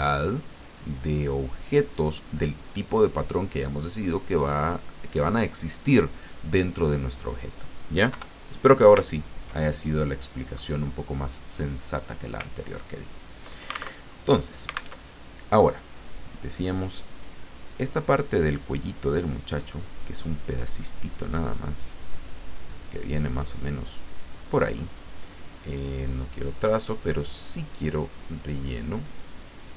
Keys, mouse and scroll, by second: 7.1 click, 8.1 Delete, 9.0-9.5 ctrl+scroll down 2, 9.6-10.8 ctrl+drag, 12.0 click, 12.7-13.2 ctrl+scroll up 2, 14.0 ctrl+alt+Tab, 15.0 alt+Tab, 17.1 click, 17.7 click, 19.3 click, 20.0 click, 22.8 click, 24.1 click, 25.7 click, 26.3 click, 26.9 click, 28.4 click.